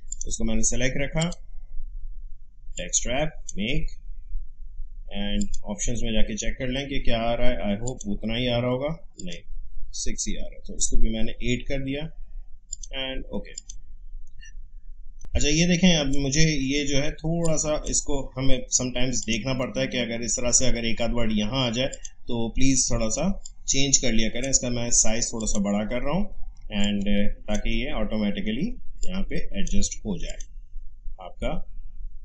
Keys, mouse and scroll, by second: 0.1-5.4 drag, 7.9 click, 9.8-12.3 scroll up 1, 12.7 click, 14.7 alt+scroll down 1, 15.2-19.2 drag, 21.9 click, 23.4-25.4 shift+drag, 26.6 space, 26.8 click, 27.1 space, 29.0 click.